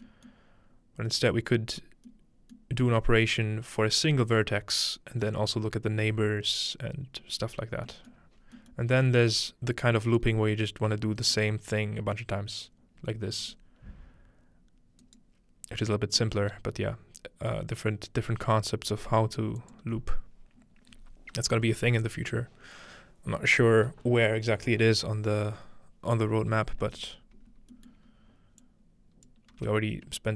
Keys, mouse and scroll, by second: 0.3 middle click, 1.0-2.1 scroll up 1, 1.3 middle click, 2.1-3.9 scroll up 1, 2.6-3.9 middle drag, 7.4-8.2 scroll down 1, 8.2-10.2 middle drag, 8.4-10.2 scroll up 3, 10.2-11.2 drag, 13.4 g, 15.0 right click, 15.8-19.1 scroll up 2, 16.0-19.1 middle drag, 16.4 g, 19.6-21.7 ctrl+drag, 27.0-27.5 scroll down 2, 27.5 scroll up 2, 27.9-29.3 middle drag, 28.1 scroll up 2, 28.6 click, 28.9-29.7 scroll up 2, 29.5 g.